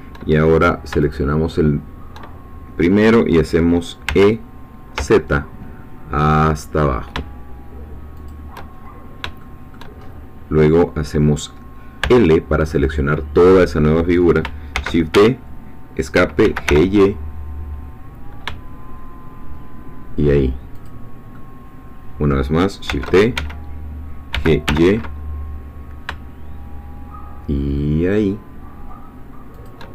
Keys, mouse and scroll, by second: 1.0 shift+click, 4.1 e, 5.0 z, 8.2 shift+click, 8.7-9.0 shift+scroll down 2, 9.4 shift+middle click, 10.0-12.0 shift+scroll up 3, 12.0 l, 14.8 shift+d, 15.2 shift+Escape, 16.4 g, 16.7 y, 20.8 shift+click, 21.3-22.5 shift+middle drag, 22.9 shift+d, 23.4 Escape, 24.3 g, 24.7 y, 29.6 shift+click.